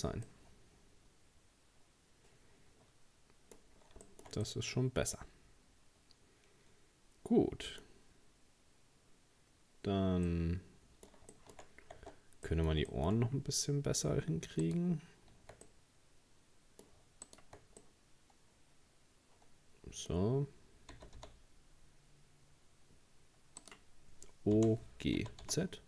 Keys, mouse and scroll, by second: 0.0 scroll down 3, 0.3-3.3 middle drag, 3.7 scroll down 3, 4.0-7.5 shift+middle drag, 10.3-11.6 middle drag, 11.6-12.0 shift+scroll up 2, 12.0 Tab, 12.4 scroll up 1, 12.5 middle click, 13.1-14.0 scroll up 6, 14.0-14.6 scroll down 2, 14.6 right click, 15.7-17.3 middle drag, 17.3 shift+right click, 17.8-20.8 middle drag, 20.9 g, 24.6 o, 25.2 g.